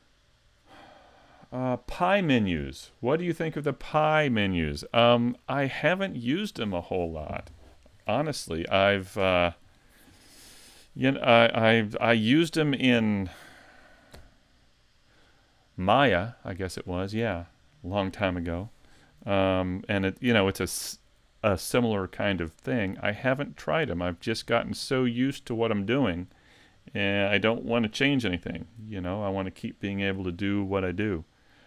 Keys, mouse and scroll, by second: 22.7 middle click, 31.2 middle click.